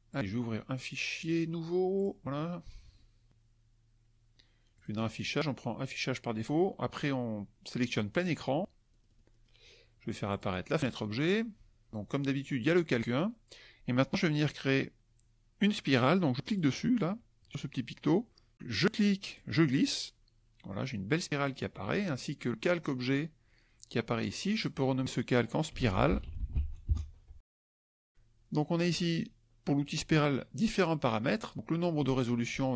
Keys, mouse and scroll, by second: 0.0 click, 1.2 click, 1.9 click, 4.7 click, 7.9 click, 8.1 click, 10.2 click, 10.8 click, 16.5 click, 19.3-21.6 drag, 24.4 click, 25.4-27.0 typing.